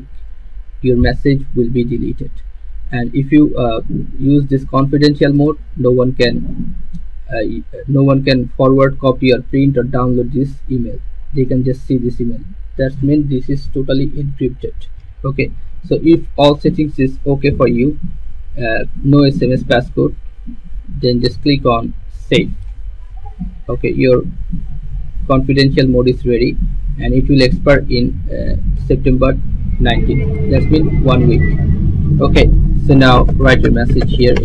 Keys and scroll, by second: 33.0-34.4 typing.